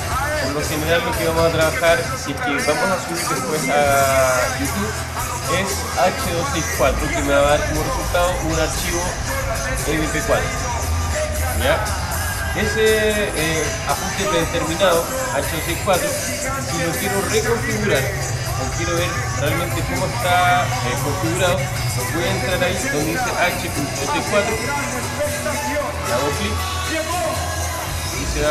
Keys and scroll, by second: 25.7 alt+super++.